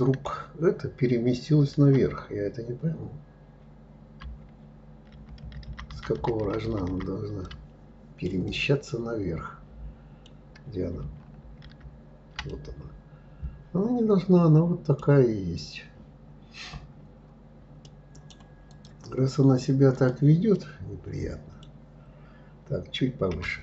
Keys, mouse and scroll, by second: 4.8 ctrl+z, 5.1 ctrl+z, 7.1-11.1 ctrl+middle drag, 12.1-15.1 middle drag, 15.1-15.9 scroll down 1, 15.9-16.5 scroll up 2, 17.5 right click, 18.3 click, 19.6 click, 20.2-23.0 middle drag, 23.0 g.